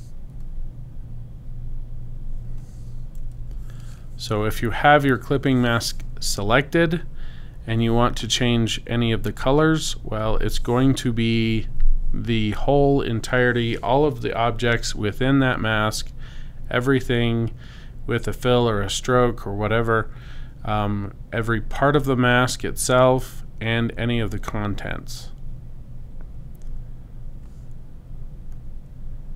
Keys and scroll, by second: 0.4 /, 3.4 super+z.